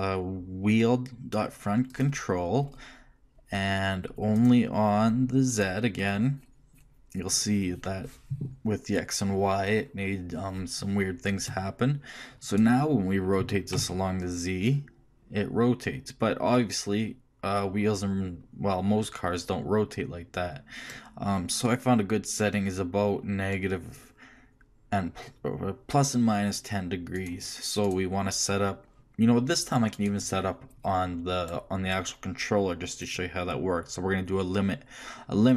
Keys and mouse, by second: 0.3-4.3 middle drag, 11.0-12.5 middle drag, 12.5-14.3 right drag, 13.4 r, 27.9-29.7 right drag, 29.9-31.8 right drag, 33.0-35.5 drag.